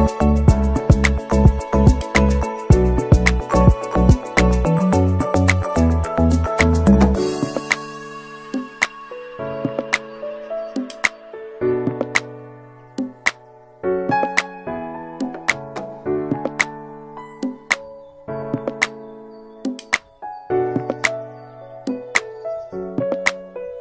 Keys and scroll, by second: 9.9 Delete, 13.2 Delete.